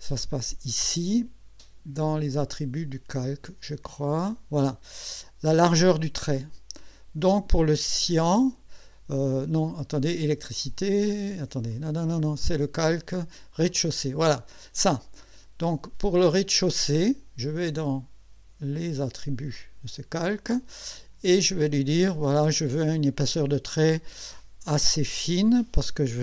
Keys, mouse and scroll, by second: 0.3 click, 3.2 click, 11.7 click, 13.7 click, 14.3 click, 15.6 click, 19.5 click, 21.4 click.